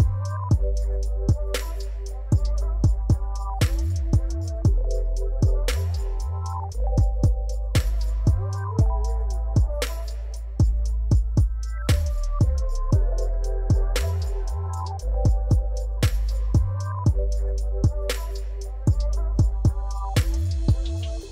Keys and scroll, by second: 0.3 Tab, 6.8 Tab, 13.0 Tab, 17.2 Tab, 18.2 2, 20.1 shift+z.